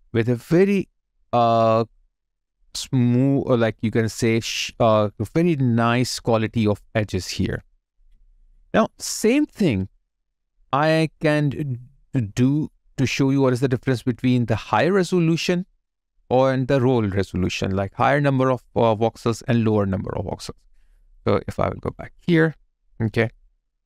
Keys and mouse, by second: 1.3 alt+right click, 6.9 alt+right click, 7.2 alt+click, 13.1 alt+right click, 13.4 alt+click, 14.7 alt+right click, 15.1 alt+middle click, 15.7 alt+right click, 16.2 alt+middle click, 19.2 shift+click.